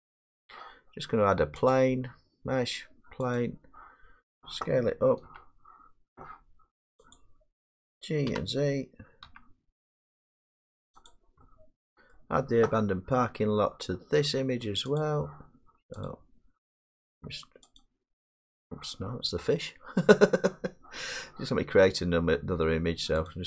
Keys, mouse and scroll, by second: 0.4 middle click, 1.6 scroll up 5, 1.7 click, 2.9-3.4 scroll, 3.4 click, 3.8 middle click, 5.3 s, 7.2 click, 8.3 g, 9.3 z, 11.1 click, 12.2 middle click, 12.8 g, 15.0 click, 16.1 click, 17.8 click.